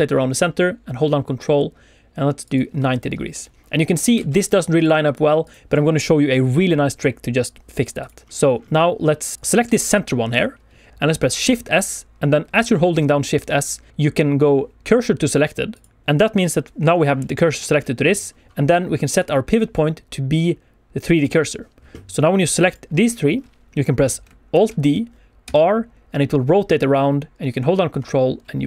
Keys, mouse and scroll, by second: 2.4 ctrl+click, 4.1 alt+a, 4.4 click, 4.7 click, 5.0 click, 5.4 click, 6.3 click, 6.5-7.3 scroll down 3, 6.8 shift+middle click, 7.3 scroll up 2, 7.7 shift+middle click, 7.8-9.3 shift+scroll down 2, 9.3 click, 10.9 shift+s, 11.3 shift+s, 16.3 click, 19.1 click, 22.0 click, 24.5 alt+d, 25.4 r.